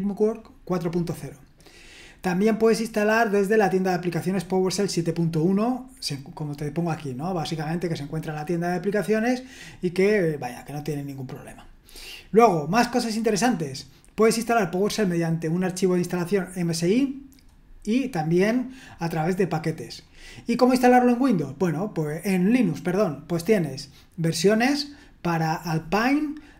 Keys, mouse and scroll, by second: 1.2-1.8 scroll down 1, 1.8-7.3 scroll down 1, 7.3-11.2 scroll down 1, 11.2-13.3 scroll down 2, 13.3-16.9 scroll down 1, 16.9-18.5 scroll down 1, 18.5-20.0 scroll down 1, 20.0-20.6 scroll down 1, 20.6-21.3 scroll down 1, 21.3-22.3 scroll down 1, 22.3-23.1 scroll down 1, 23.1-26.5 scroll down 1.